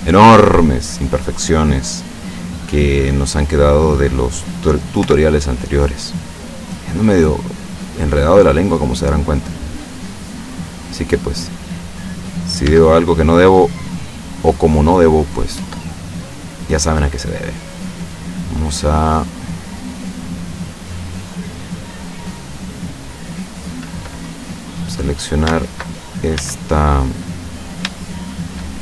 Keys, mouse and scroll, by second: 0.7 scroll down 1, 3.0-4.6 drag, 5.0 o, 5.7-6.7 drag, 6.7-7.1 scroll down 1, 7.2-8.3 scroll up 2, 8.4-9.1 scroll down 2, 11.8 middle click, 12.7 Tab, 13.1-15.4 middle drag, 15.6 Tab, 16.1-18.2 middle drag, 19.1-24.1 middle drag, 25.1 right click, 26.4 a, 27.6-28.0 scroll up 2, 28.0 shift+middle click.